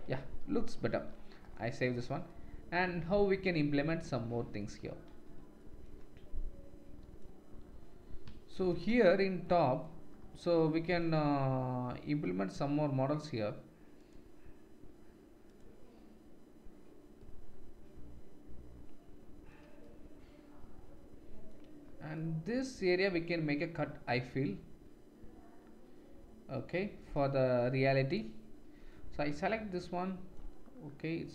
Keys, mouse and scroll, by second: 0.8-1.4 ctrl+middle drag, 1.0 ctrl+s, 6.0-14.0 middle drag, 8.9 Tab, 14.0 click, 14.1-15.4 middle drag, 15.4 click, 15.6-21.1 middle drag, 27.9 alt+click.